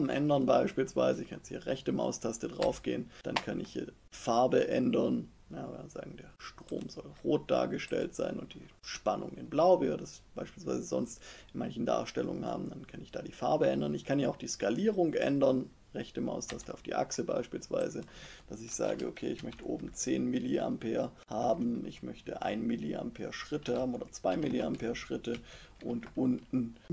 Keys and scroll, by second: 19.0-20.2 typing, 21.2 Tab, 22.1 1, 23.3-24.7 typing, 25.1 Tab.